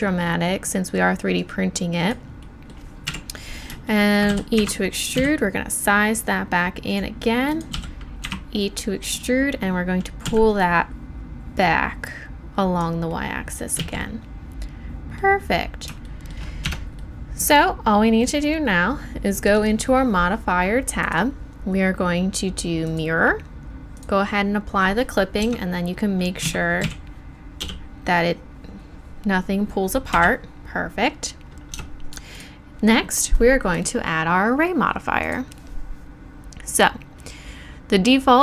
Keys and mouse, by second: 1.4-3.1 middle drag, 3.1 KP_1, 4.3 e, 5.2 s, 7.7 e, 8.6-10.2 drag, 10.2 z, 10.9 click, 13.8 z, 16.0 middle click, 16.6 Tab, 19.9-22.9 drag, 23.9-26.1 drag, 25.4 Tab, 26.4 a, 26.8 a, 27.6 g, 31.7 Tab.